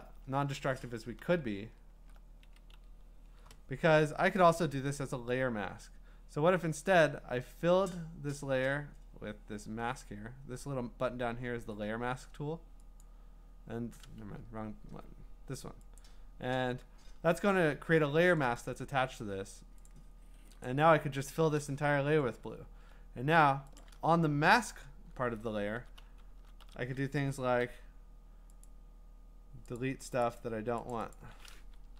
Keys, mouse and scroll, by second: 0.6 ctrl+alt+z, 1.2 ctrl+alt+z, 1.6 ctrl+alt+z, 2.0 ctrl+alt+z, 2.8 ctrl+z, 13.0-14.1 drag, 14.3 Escape, 16.0 click, 17.2 scroll up 3, 17.4 scroll down 1, 19.9 click, 20.5 scroll, 20.6 click, 21.6 alt+BackSpace, 23.8 click, 25.8 [, 26.4 [, 26.6 [, 27.6 i, 28.6 click, 29.8 click, 30.2 click, 30.9 click, 31.1 click, 31.8 BackSpace.